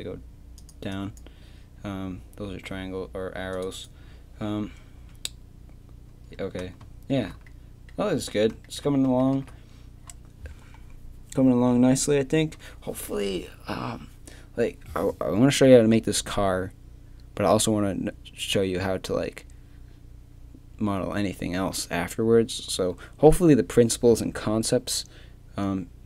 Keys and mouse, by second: 4.8 Tab, 9.3 shift+c.